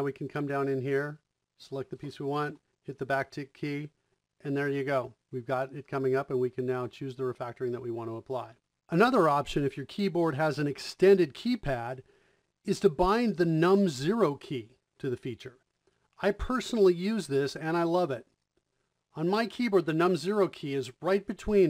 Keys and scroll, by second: 2.7 `, 5.5 Down, 7.3 Return, 8.6 Return, 14.4 KP_0.